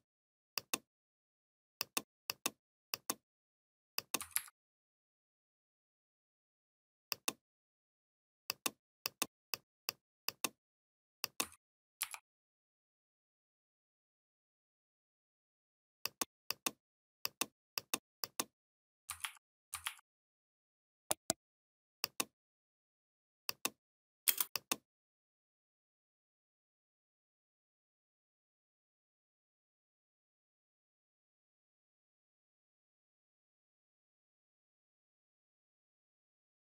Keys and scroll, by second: 4.2 ctrl+c, 11.8 ctrl+f, 19.0 ctrl+a, 19.7 ctrl+a, 24.1 space.